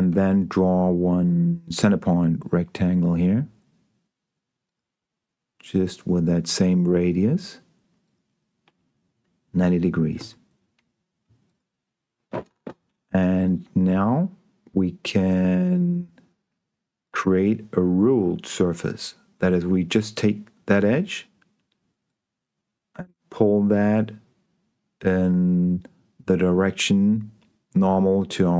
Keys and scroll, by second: 0.4 s, 10.5 Escape.